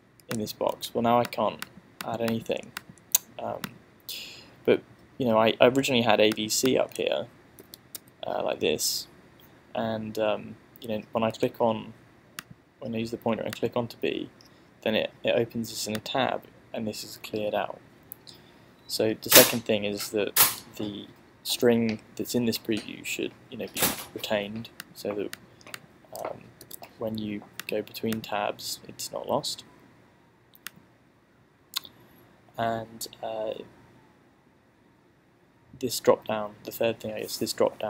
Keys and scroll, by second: 0.8 a, 7.7 b, 8.0 c, 26.4-27.3 typing.